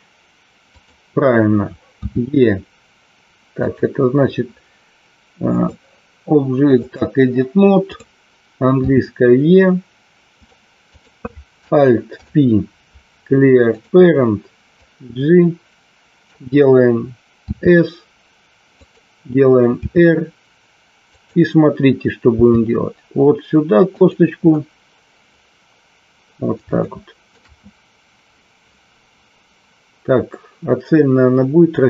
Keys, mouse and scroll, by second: 0.8 click, 1.9 e, 3.5 click, 5.5-6.9 drag, 7.9 click, 8.8 e, 10.3 click, 12.0 alt+p, 14.8-16.2 drag, 17.4 s, 19.8 r, 21.1 click, 22.3 g, 23.9 click, 26.8 shift+middle click.